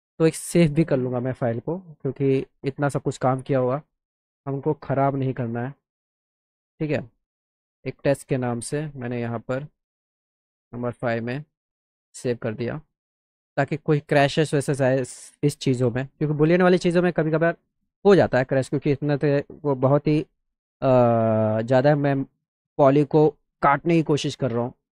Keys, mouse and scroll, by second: 0.3 click, 1.8 click, 3.1 click, 5.1 click, 6.9 click, 8.9 click, 9.2 click, 10.2 click, 11.8 click, 14.0 click, 14.9 scroll down 1, 15.1 middle drag, 15.6 middle click, 17.5 click, 18.2 click, 18.7 click, 21.4 F3, 21.9 F3, 22.6 click, 23.0 click, 23.4 click, 24.3 scroll up 1.